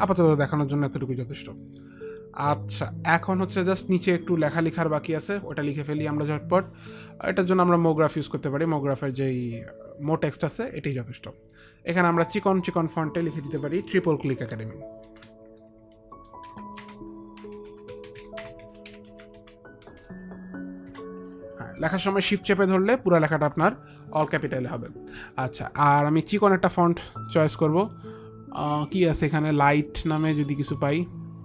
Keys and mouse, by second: 1.8 alt+click, 3.4 alt+click, 4.3 alt+click, 7.9 alt+click, 12.6 click, 15.2 click, 15.2 shift+t, 16.3 shift+i, 16.4 shift+p, 19.2 shift+c, 23.6-24.3 typing, 26.5 click, 28.0 click, 28.0 click.